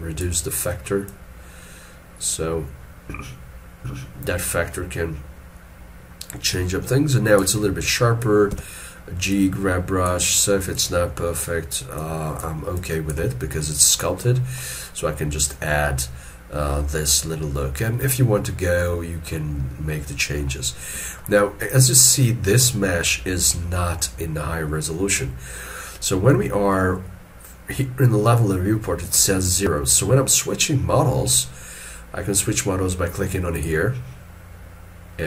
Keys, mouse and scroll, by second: 8.5 g, 13.5 scroll down 1, 18.1 shift+middle click, 32.0-35.0 scroll down 1.